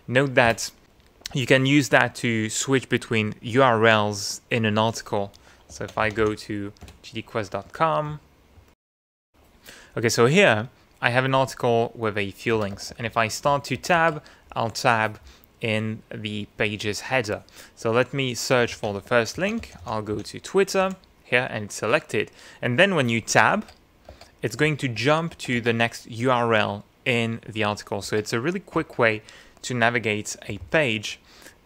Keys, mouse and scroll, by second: 0.5 Return, 7.4 ctrl+t, 7.7 ctrl+g, 7.8 ctrl+d, 8.5 Return, 12.5 Tab, 18.7 ctrl+f, 19.1-20.6 typing, 20.8 Escape, 23.5 Tab, 28.0 Tab, 28.8 shift+Tab, 30.6 Page_Down.